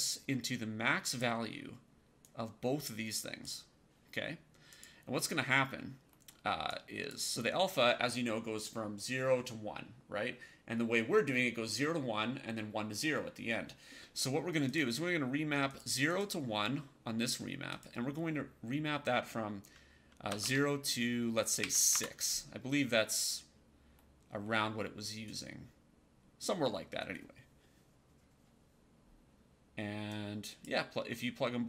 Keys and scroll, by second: 20.2 KP_0, 20.3 Tab, 21.5 KP_6, 21.8 Return.